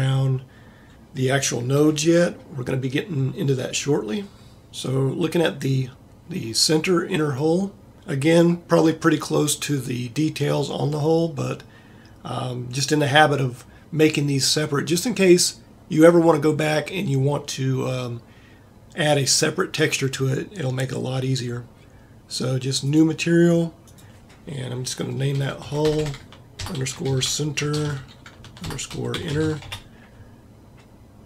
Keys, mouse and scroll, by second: 26.0 l, 29.2 n, 29.5 n.